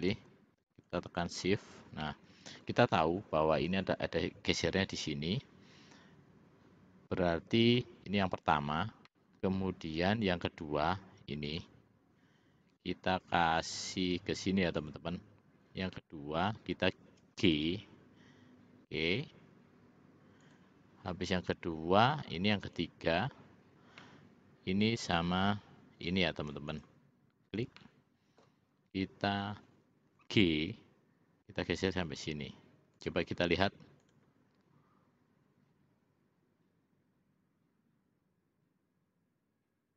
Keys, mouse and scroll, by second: 2.1 middle click, 9.2-10.3 middle drag, 14.9 shift+click, 17.6 g, 24.1-25.1 middle drag, 26.8 shift+click, 27.9 middle click, 30.3 g, 34.2 click.